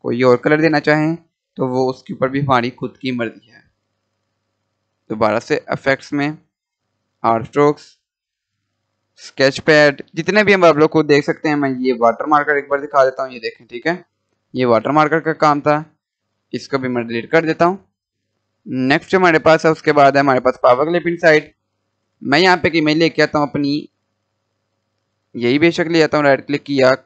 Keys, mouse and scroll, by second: 5.2 click, 11.8 click, 17.2 Delete, 19.3 click, 20.9 scroll down 1, 21.7 scroll down 1, 24.2 scroll up 1, 25.0 click, 25.5 right click.